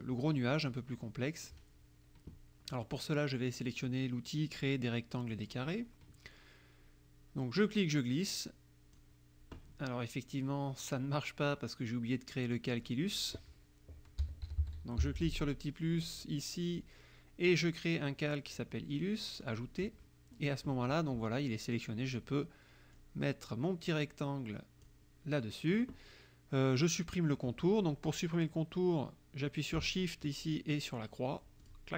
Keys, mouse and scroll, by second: 1.0 click, 5.4 click, 7.6-9.2 drag, 12.7 click, 14.0-15.8 typing, 19.4 click, 23.0-25.1 drag, 31.7 shift+click.